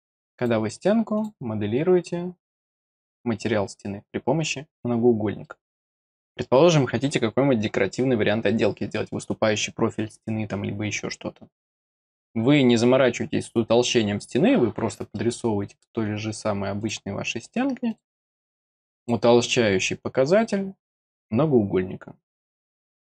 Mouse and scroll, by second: 0.3 click, 1.1 click, 2.5 click, 3.4 scroll down 2, 5.4 middle click, 15.1 middle click, 16.8 click, 17.9 click, 18.9 click, 20.3 click, 22.3 click.